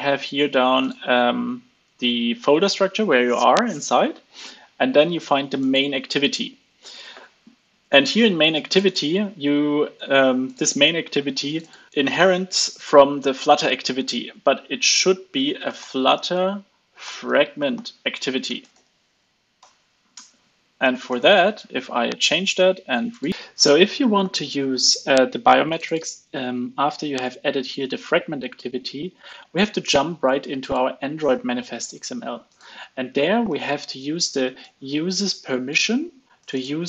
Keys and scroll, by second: 20.0 super+s, 20.4 alt+super+l, 21.0 ctrl+alt+o, 21.4 super+s.